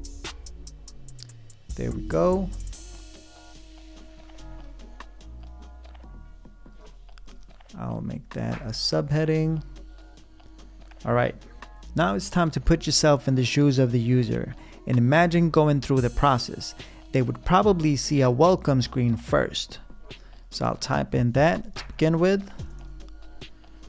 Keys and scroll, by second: 0.0 l, 21.1 Return, 21.4-23.8 typing.